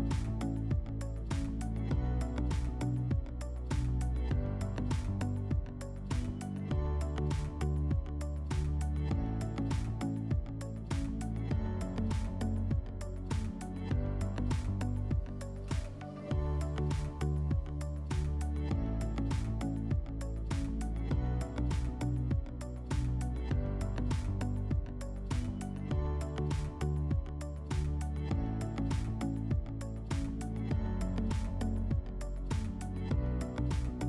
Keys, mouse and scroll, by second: 5.5-6.8 drag, 6.8 middle click, 8.0 click, 9.9 click, 11.2 click, 12.2 click, 13.2 click, 14.6 click, 15.1 click, 15.9 click, 16.9 ctrl+z, 17.9 ctrl+z, 18.3 ctrl+z, 20.0 click, 21.3 middle click, 22.2 click, 23.3 scroll, 23.8 click, 24.8 click, 26.6 click, 27.3 click, 31.4 click, 32.2 click.